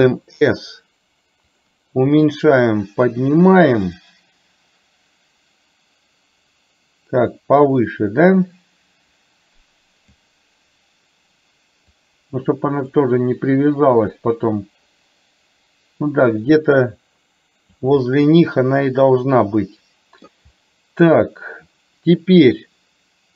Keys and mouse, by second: 2.4-10.2 drag, 12.1 click, 14.1-17.9 drag, 18.1-20.4 middle drag.